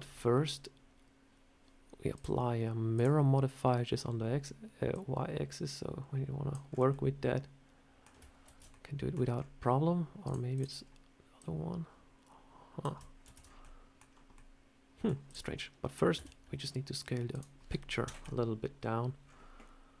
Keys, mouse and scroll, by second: 2.0 click, 3.9-4.8 scroll up 1, 4.8 click, 6.5-6.9 scroll down 4, 6.7 middle click, 8.3 ctrl+z, 8.5 middle click, 9.2 scroll up 2, 10.1 click, 10.4 click, 10.7-11.2 scroll down 1, 11.2 click, 13.1 ctrl+z, 13.5 middle click, 14.2 middle click, 15.1 click, 15.6-16.0 scroll down 1, 16.0 s, 17.9 KP_1, 18.0 KP_1, 19.1 scroll up 4.